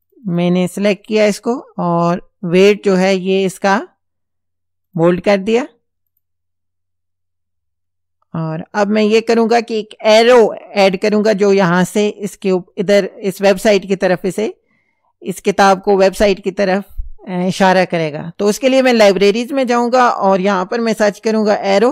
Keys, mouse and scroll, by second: 2.6 click, 4.9 click, 6.1 click, 18.9 click, 20.2 click, 21.2-21.9 typing.